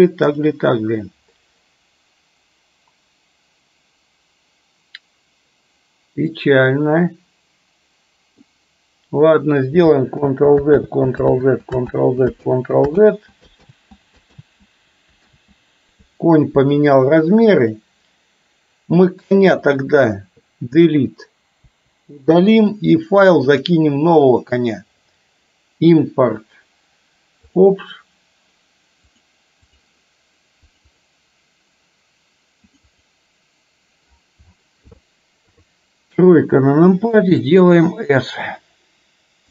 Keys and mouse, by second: 6.3-8.5 middle drag, 9.8 ctrl+click, 10.2 ctrl+z, 11.0 ctrl+z, 11.3 ctrl+z, 12.0 ctrl+z, 12.5 ctrl+z, 13.1 ctrl+z, 13.7 ctrl+z, 14.5 ctrl+z, 15.3 ctrl+z, 17.6 click, 21.7 Delete, 23.7-27.8 drag, 35.5 KP_3, 37.2 s.